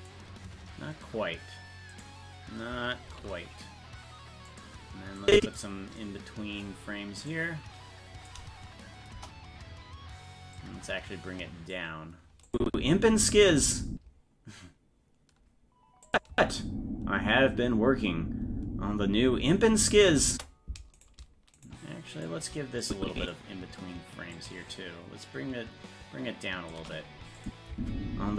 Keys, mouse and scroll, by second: 1.9 right click, 3.3 shift+d, 5.2 click, 7.3-8.3 drag, 9.2 KP_0, 10.6-11.8 drag, 12.5 click, 12.7 space, 16.1 click, 16.3 space, 21.1 right click, 21.7 shift+right click, 22.8 click, 24.4-26.8 shift+drag, 27.4 click, 27.7 space.